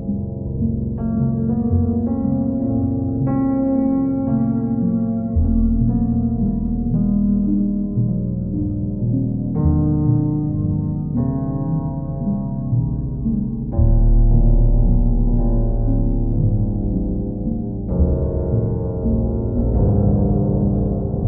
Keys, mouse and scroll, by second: 0.2 click, 1.4 alt+click, 3.0 alt+click, 3.4 alt+click, 5.6 click, 6.0 shift+click, 6.7 alt+click, 7.9 alt+click, 9.0 middle click, 9.2 middle click, 9.7 right click, 9.9 right click, 10.2 right click, 10.4 right click, 12.4-13.4 middle drag, 15.6-16.7 middle drag, 17.8 right click, 18.7 right click, 19.2 alt+middle click, 20.3 alt+middle click.